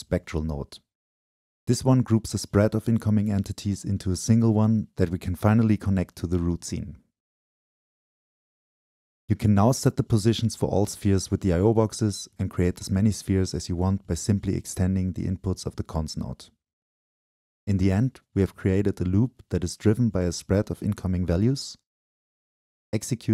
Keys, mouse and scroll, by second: 0.0-2.1 drag, 0.0-2.1 scroll up 2, 3.1-10.8 drag, 16.8-17.4 drag, 17.4-20.0 middle drag, 20.7 click, 21.1-23.2 drag.